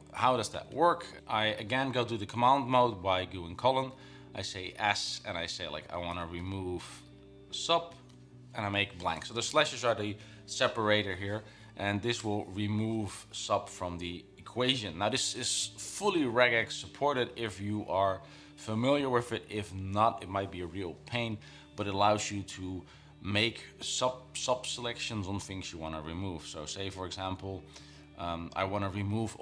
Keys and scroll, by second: 3.8-5.1 typing, 6.2-8.2 typing, 26.0 Down, 26.2 Down, 26.4 Down.